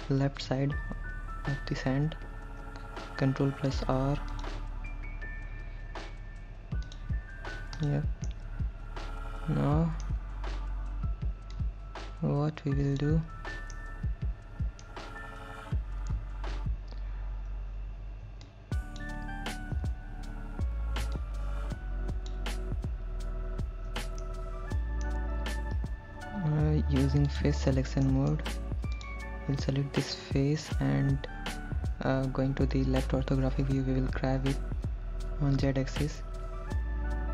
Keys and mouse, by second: 2.7 ctrl+r, 7.1 click, 8.1 click, 8.5-10.3 middle drag, 11.8-13.3 drag, 14.0-15.1 middle drag, 18.7 shift+click, 21.4-22.6 shift+drag, 24.5 middle click, 27.5 click, 28.3 middle click, 30.4 middle click, 33.0 KP_3, 34.4 g, 35.8 z.